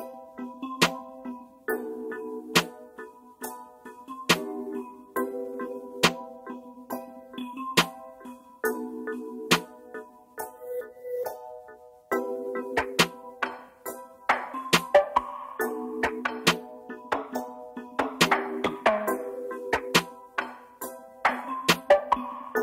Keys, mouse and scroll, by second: 5.8 Down, 5.9 Down, 6.1 Down, 6.3 Right, 6.5 Right, 6.7 Right, 7.0 Up, 8.1 Up, 8.8 Right, 9.4-9.7 scroll down 1, 10.0 typing, 11.1 ctrl+space, 19.7 ctrl+space, 21.6 double click.